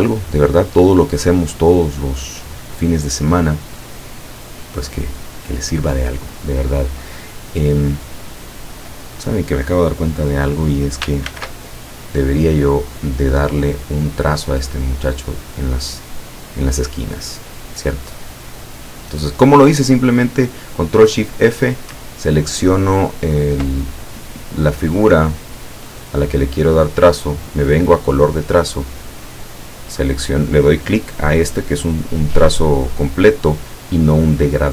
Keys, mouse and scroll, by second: 5.5 click, 7.4 click, 11.4 ctrl+shift+f, 13.8 click, 14.8 click, 17.1 click, 18.5 click, 22.2 ctrl+scroll up 2, 23.3 ctrl+scroll down 2, 28.3 click, 29.7 click.